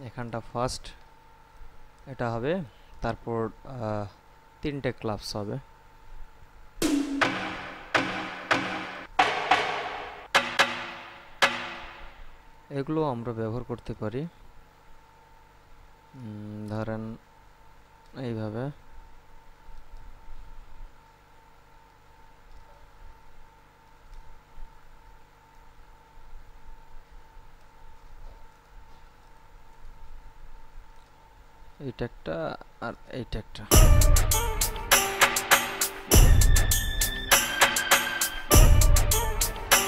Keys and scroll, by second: 33.8 space.